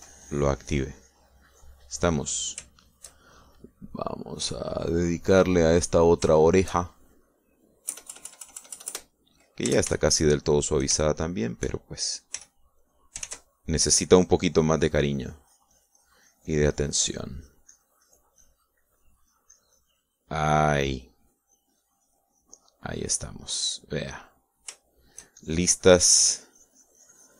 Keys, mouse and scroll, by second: 0.2-2.4 drag, 2.5-3.7 middle drag, 3.9 shift+middle click, 4.8-7.3 shift+drag, 6.4 shift+middle click, 7.4 shift+middle click, 9.0 KP_Add, 11.1 shift+middle click, 12.1 shift+middle click, 13.5 f, 13.9 middle click, 14.0 click, 14.3 ctrl+s, 14.5 ctrl+click, 15.4 click, 16.3-19.4 drag, 19.5 click, 23.7 click, 24.7 middle click, 25.8 shift+middle click, 26.5-27.3 shift+drag.